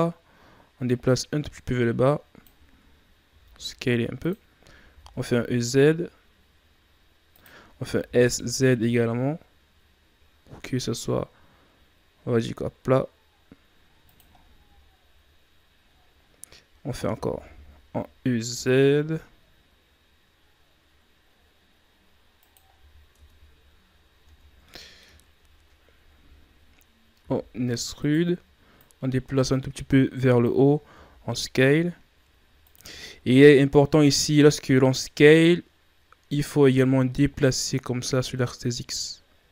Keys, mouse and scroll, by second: 0.8-3.2 drag, 3.2 s, 14.3-14.8 scroll down 5, 15.8-17.1 scroll up 6, 17.1 e, 22.6 scroll down 7, 23.1 Tab, 23.8-24.2 scroll up 5, 24.2 Tab, 24.6 middle click, 25.1-27.2 scroll up 3, 27.2 e, 28.7-30.8 drag, 30.8 s, 33.0-36.0 middle drag, 36.7-39.5 drag.